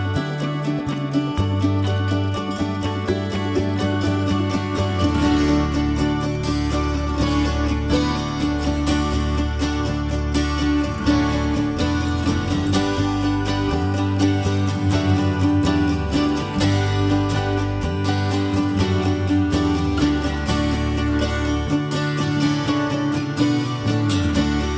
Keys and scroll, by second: 3.6-6.7 typing, 10.6 e, 13.6 l, 14.3 e, 15.0 l, 15.6 e, 17.6 space, 19.5 l, 20.2-21.0 Caps_Lock, 21.4 Escape.